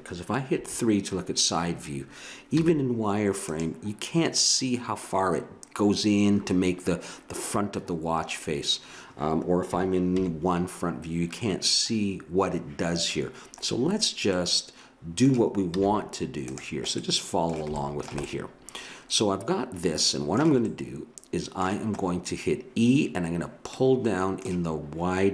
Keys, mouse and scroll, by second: 0.5 KP_3, 2.6 z, 10.1 KP_1, 14.4-16.5 middle drag, 15.7 z, 17.0-20.2 middle drag, 20.7-24.7 middle drag.